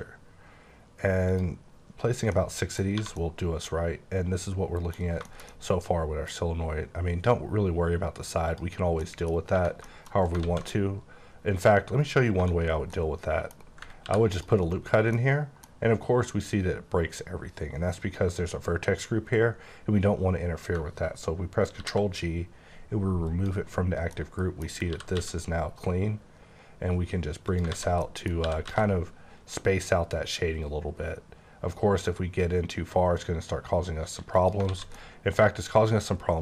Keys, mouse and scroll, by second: 0.0-1.3 scroll up 1, 1.3 click, 2.3 middle click, 2.9 scroll down 1, 3.0 1, 3.2 middle click, 4.9 scroll down 1, 5.2 shift+middle click, 5.6 double middle click, 6.3 scroll down 1, 8.5 click, 9.0 middle click, 9.8 middle click, 10.2 scroll up 1, 10.4 alt+z, 10.7 middle click, 12.3 2, 12.8 middle click, 14.0 ctrl+r, 14.3 click, 14.6 right click, 15.1 middle click, 20.8 ctrl+middle click, 21.8 ctrl+g, 23.3 click, 24.1 middle click, 24.9 typing, 27.5-28.7 typing, 27.6 alt+click, 27.7 alt+z, 28.0 middle click, 34.4 click, 34.7 alt+z, 34.9 middle click.